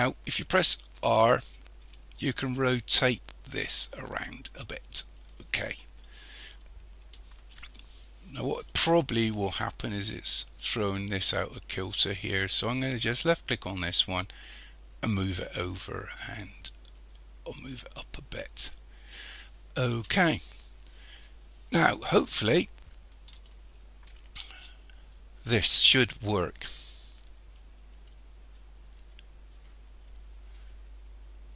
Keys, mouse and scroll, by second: 1.1 r, 6.5-8.0 shift+middle drag, 8.0-8.7 scroll up 3, 8.7-9.9 shift+middle drag, 9.9-13.2 scroll up 6, 13.2 click, 14.6-19.5 drag, 19.5-21.3 scroll down 11, 21.6-23.4 scroll up 1, 23.4-26.5 shift+middle drag, 27.9 click.